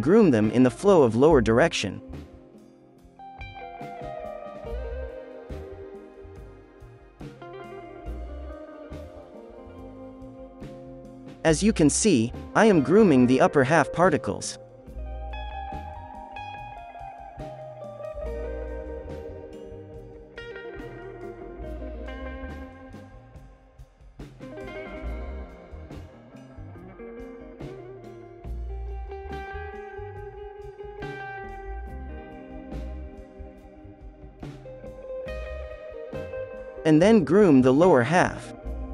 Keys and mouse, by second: 0.2 KP_3, 0.8 ctrl+KP_3, 2.2-5.0 middle drag, 2.2-5.0 right drag, 5.3 ctrl+l, 5.6 middle click, 6.3-8.0 right drag, 7.0 ctrl+z, 7.8 ctrl+l, 8.0 middle click, 8.1 f, 8.2-10.4 drag, 8.3 f, 9.4 f, 9.6 right click, 9.7 f, 10.4-12.2 drag, 10.7 f, 12.4 f, 13.6 f, 13.9 click, 14.7 f, 14.8-21.1 drag, 14.8-16.6 middle drag, 14.8-16.6 right drag, 16.0-18.8 typing, 19.9 f, 20.1 f, 20.5 right click, 20.8 ctrl+KP_3, 21.1 middle click, 21.4 middle click, 21.5-31.1 typing, 21.6-24.4 drag, 21.6 right click, 21.9 middle click, 22.2 middle click, 24.6 middle click, 25.0 click, 25.8 click, 26.2 click, 26.5-32.5 drag, 26.7 right click, 29.3 right click, 32.3 f, 32.9-34.7 drag, 33.0 f, 33.3 f, 34.0-35.0 middle drag, 34.0 right click, 34.0 f, 34.7 ctrl+i, 35.2 f, 35.3-38.9 drag, 36.4-38.1 right drag.